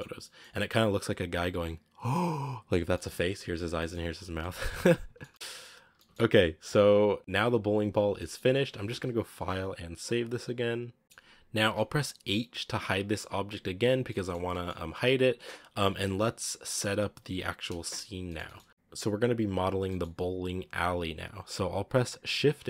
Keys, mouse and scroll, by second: 0.1 middle click, 1.3 scroll up 1, 2.8 shift+middle drag, 3.1-3.5 scroll up 1, 3.5 scroll down 1, 3.7-4.5 shift+middle drag, 4.5 scroll down 2, 4.7-5.5 middle drag, 5.5 scroll up 2, 7.2 scroll down 2, 7.9 scroll down 1, 8.1-13.1 middle drag, 13.1 h, 13.8 scroll down 3, 14.0-14.6 middle drag, 14.6-15.1 scroll up 1, 15.1-16.2 scroll up 1, 16.2-17.3 scroll down 8, 17.3-17.7 scroll down 1, 17.7-19.5 shift+middle drag, 19.5 scroll down 2, 19.8 middle click, 20.1 scroll up 1.